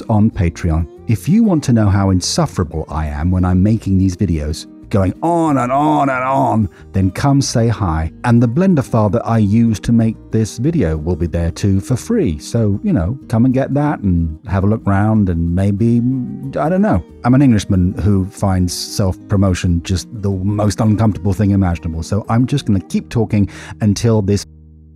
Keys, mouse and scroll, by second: 9.4 middle click, 9.9 middle click, 10.1 middle click, 10.5 middle click.